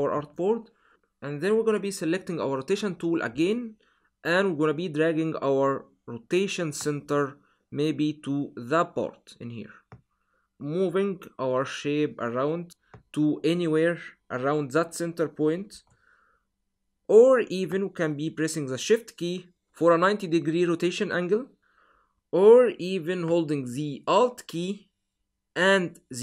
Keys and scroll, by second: 15.6 super+z.